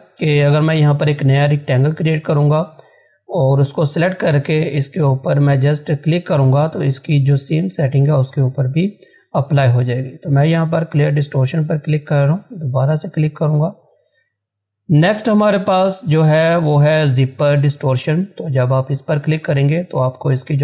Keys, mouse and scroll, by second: 10.8 click, 18.4 click.